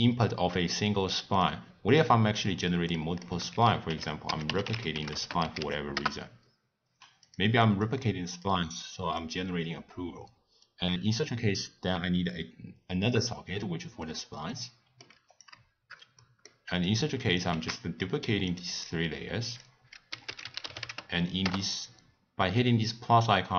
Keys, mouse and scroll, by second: 1.4-3.5 middle drag, 3.5 ctrl+a, 7.8 click, 8.8 click, 10.6 click, 14.5 middle click, 15.3 click, 16.2-16.8 middle drag, 16.8 click, 17.9 shift+d, 18.8 click, 19.4-23.5 drag.